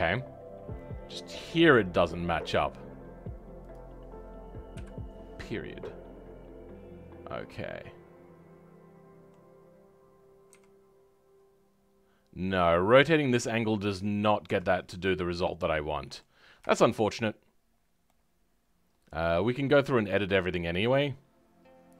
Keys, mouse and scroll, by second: 0.1-3.7 middle drag, 3.7 click, 4.7 KP_Decimal, 5.4-5.8 scroll up 2, 5.8-10.5 middle drag, 10.5 r, 14.7-15.4 scroll down 10, 15.4-17.7 middle drag, 17.7-18.0 scroll up 2, 18.0-21.9 middle drag.